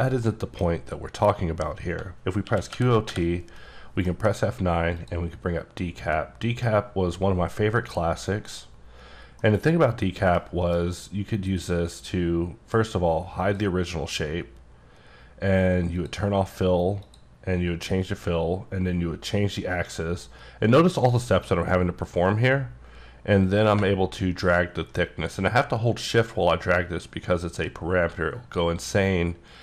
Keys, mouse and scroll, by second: 0.2 middle click, 2.4-3.1 typing, 4.0 F9, 5.0 click, 8.3 click, 9.4 middle click, 10.7 F9, 13.4 click, 16.0 click, 17.0 click, 18.7-19.7 ctrl+scroll down 1, 19.7-20.0 ctrl+scroll down 1, 20.1-20.7 ctrl+scroll up 2, 21.4 click.